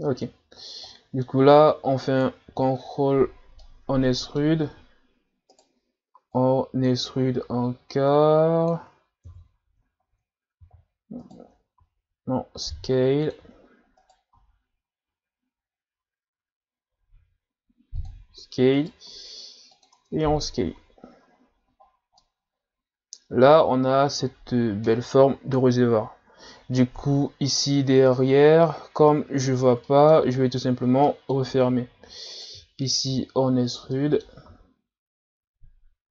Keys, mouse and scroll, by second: 0.4-0.9 scroll up 1, 0.9-2.1 middle drag, 2.1 alt+right click, 3.5 scroll up 1, 3.6-4.8 middle drag, 4.8 e, 6.4 click, 9.2 KP_1, 10.1-10.8 scroll up 1, 10.8 e, 20.0 Tab, 20.4 a, 20.8 a, 21.0-21.6 scroll down 1, 21.6 scroll down 1, 21.8-22.2 scroll up 1, 22.2-24.2 middle drag, 24.2-25.6 scroll up 2, 27.9-28.3 ctrl+scroll up 1, 28.7 scroll down 1, 29.8-30.4 middle drag, 30.4 scroll down 3, 30.7 scroll up 2, 31.0-31.5 middle drag, 31.5 Tab, 32.3 alt+right click, 33.2 e, 33.9 middle click, 34.5 s.